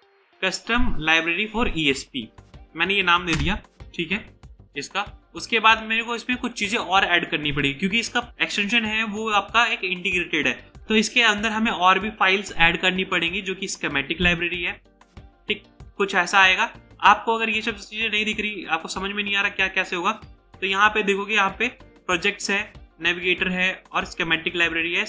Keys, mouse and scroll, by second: 0.0-0.4 typing, 3.4 Return, 4.3 scroll up 1, 5.2 right click.